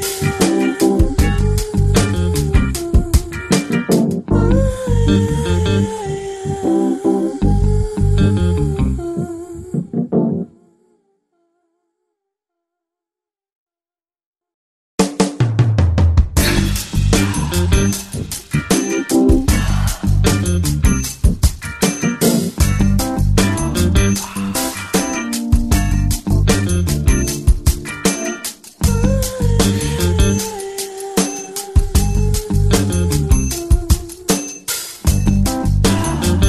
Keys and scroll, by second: 0.9 [, 1.1 [, 16.0 i, 18.5 ], 18.9 ], 20.7 x, 23.2 [, 29.1 space, 35.9 ctrl+g.